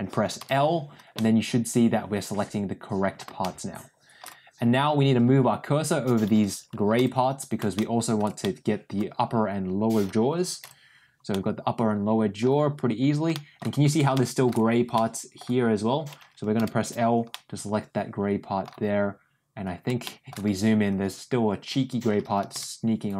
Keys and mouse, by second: 0.3 l, 1.0-3.0 middle drag, 3.3 middle click, 6.9 l, 7.6 middle click, 8.3 middle click, 10.5 l, 11.2-12.3 middle drag, 13.2 middle click, 14.1 middle click, 14.9 middle click, 16.5 l, 17.2-18.5 middle drag, 19.9 middle click, 22.4 l.